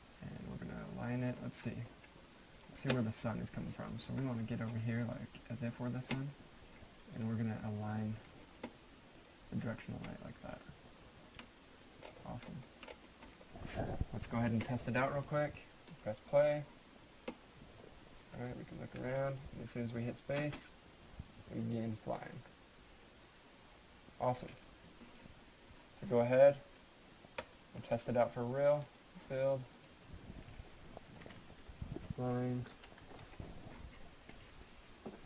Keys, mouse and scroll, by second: 1.7 middle click, 2.3 right click, 4.2 middle click, 4.5 scroll down 1, 4.8 right click, 7.1 click, 10.1 middle click, 10.5 scroll down 1, 10.9 right click, 11.4 middle click, 12.0-13.3 scroll up 1, 13.3 middle click, 13.4 scroll up 1, 15.9 click, 18.2 click, 20.3 space, 25.6 space, 25.8 click, 31.2-33.7 typing, 34.3 click.